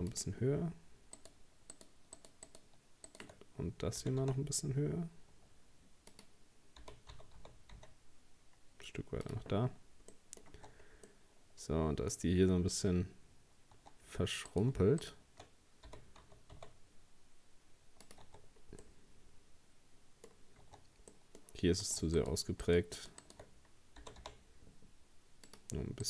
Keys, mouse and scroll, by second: 1.2 right click, 1.7 shift+right click, 2.2 shift+right click, 2.5 shift+right click, 3.1 shift+right click, 4.0 g, 6.8 g, 10.1 middle click, 10.5 Tab, 10.7-11.1 scroll down 3, 11.1-12.3 middle drag, 12.3-12.6 scroll up 1, 12.9-13.8 scroll up 2, 13.8 Tab, 14.5 right click, 15.0 shift+right click, 15.9 g, 18.3 Tab, 18.5-18.8 scroll down 4, 18.8-20.4 middle drag, 20.4-20.7 scroll up 3, 20.7 Tab, 21.1 middle click, 21.9 right click, 22.2 shift+right click, 22.7 shift+right click, 23.0 shift+right click, 23.2 shift+right click, 24.0 g.